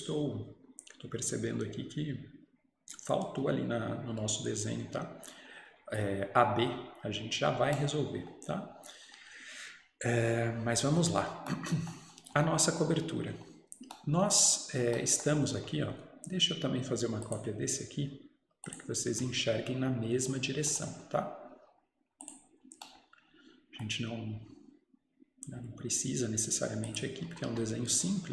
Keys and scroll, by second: 27.3 Escape, 27.6 Escape.